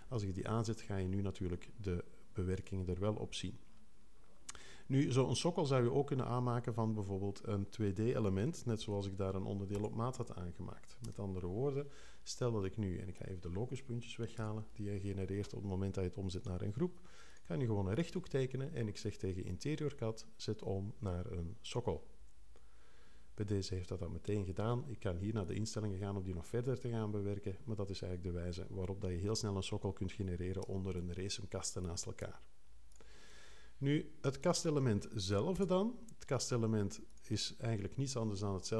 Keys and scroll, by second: 8.8 super+a, 9.7 super+BackSpace, 11.1 0, 14.3 BackSpace, 35.5 BackSpace.